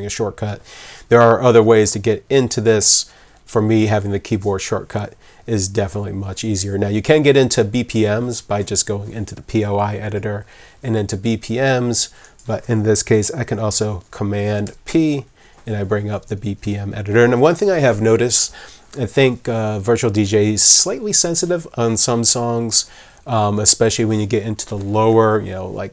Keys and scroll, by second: 14.6 super+p.